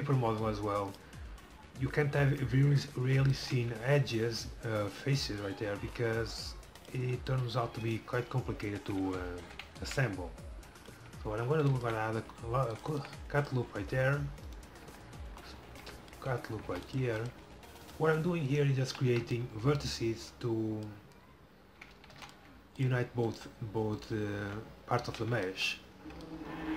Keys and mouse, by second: 0.9-1.9 middle drag, 3.4-5.8 middle drag, 6.9-8.8 drag, 7.9-9.6 right drag, 9.6 middle click, 11.6 ctrl+r, 14.6 right click, 14.9 f, 15.7 middle click, 16.7 ctrl+r, 17.9 middle click, 18.9 f, 22.2 ctrl+r, 24.5 f, 25.1 f.